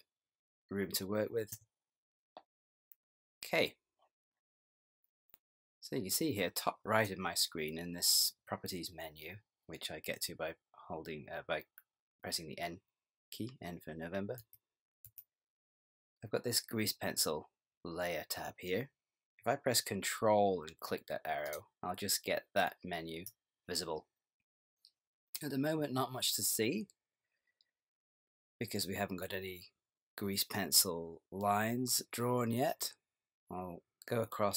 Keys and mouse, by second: 6.2 click, 14.4 n, 15.1 n, 21.4 ctrl+click.